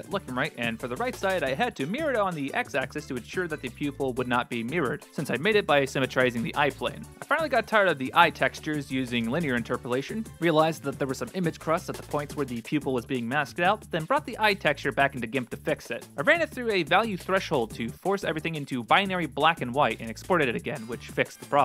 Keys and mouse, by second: 0.2 g, 0.5 s, 3.0 g, 6.8 middle click, 9.3 click, 12.7 click, 19.9 ctrl+alt+r, 20.0 ctrl+space.